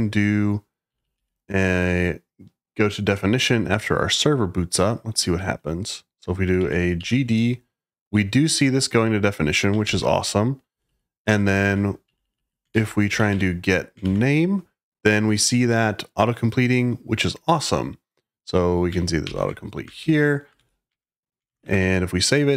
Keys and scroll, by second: 0.6-1.5 typing, 6.3-7.4 typing, 9.8 ctrl+o, 10.6-13.9 typing, 19.2 ctrl+y, 19.7-21.4 typing, 22.4-22.5 typing.